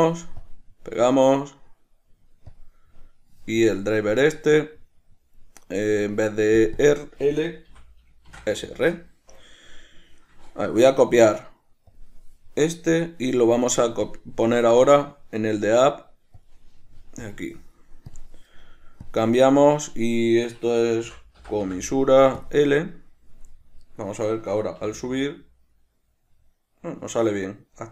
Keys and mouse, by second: 0.0-3.9 right drag, 3.9 drag, 6.9-11.0 drag, 9.1 Return, 11.0-14.3 right drag, 14.3 drag, 15.3-17.5 right drag, 17.5 drag, 18.4 drag, 19.3-24.1 drag, 24.1 right click, 25.1 g.